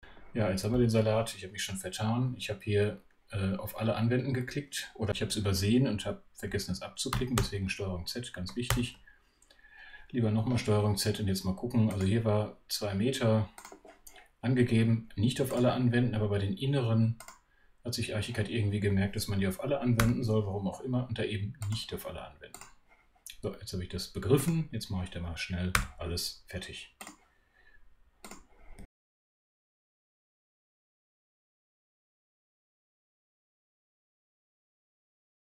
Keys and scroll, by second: 7.3 super+z, 8.7 super+z, 19.9 2, 28.7 2.